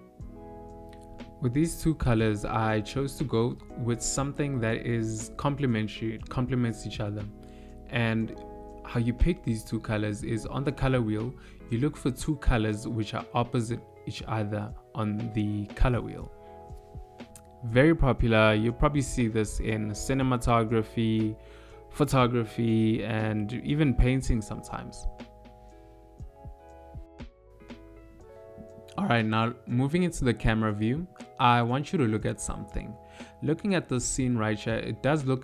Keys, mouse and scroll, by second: 1.1 click, 30.0 KP_0.